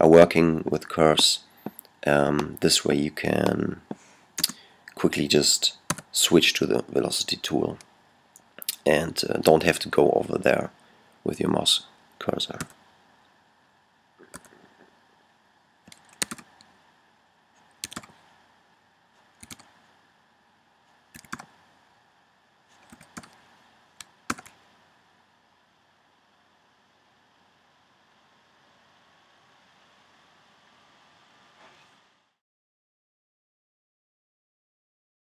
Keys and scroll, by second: 5.7 v, 12.5 v, 14.1 typing, 15.8-16.8 typing, 17.8 typing, 19.1-19.8 typing, 20.9-23.4 typing, 24.1 super+p.